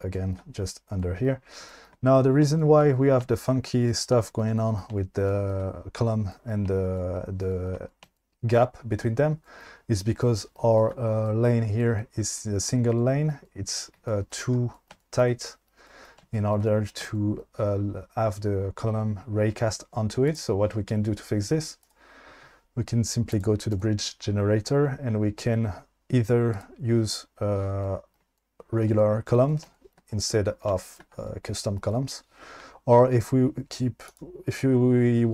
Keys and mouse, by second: 21.8-23.4 drag, 23.8 click, 27.0 click, 28.4-28.9 shift+middle drag, 29.7-30.0 shift+middle drag, 30.7 shift+middle drag.